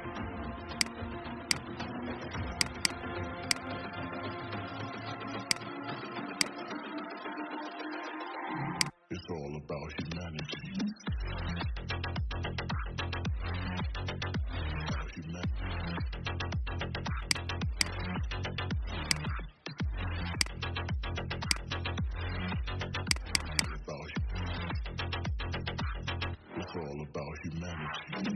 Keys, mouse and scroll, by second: 4.0-4.3 alt+scroll down 1, 5.4 click, 8.1 ctrl+g, 8.7 click, 11.5-11.9 alt+scroll down 1, 13.1 alt+scroll up 1, 14.1-14.6 alt+scroll up 1, 17.2 click, 20.2 shift+click, 21.5 click, 23.3-24.3 drag, 24.9-27.9 typing.